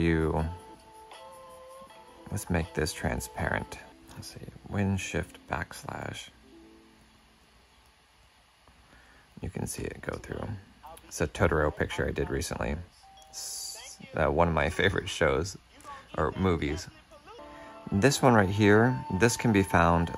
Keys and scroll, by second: 0.7 super+Tab, 2.4 super+Tab, 6.2 shift+super+\.